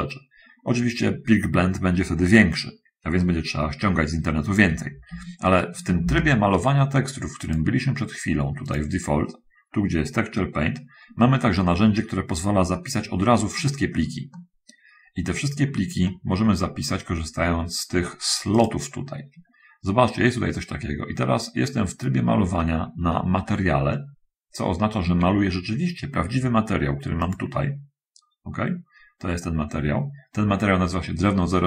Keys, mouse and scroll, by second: 5.4 Escape, 6.2 shift+space, 7.6 click, 8.6 click, 13.0 middle click, 13.8 middle click, 15.1-16.9 middle drag, 18.8 click, 23.4-25.2 ctrl+middle drag, 27.5 click.